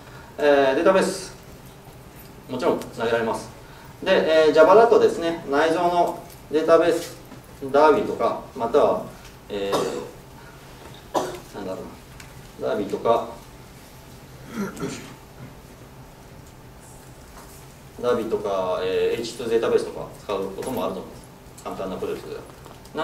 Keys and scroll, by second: 16.2 ctrl+super+f.